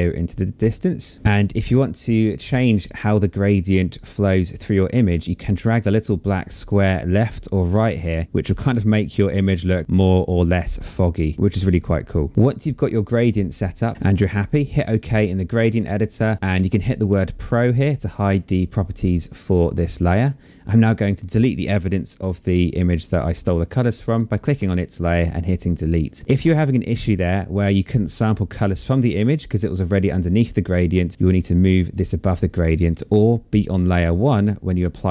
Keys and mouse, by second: 2.1 click, 5.6 click, 13.6 click, 14.5 click, 18.6 click, 20.3 click, 24.0 click, 26.3 click, 30.7 click, 32.5 click.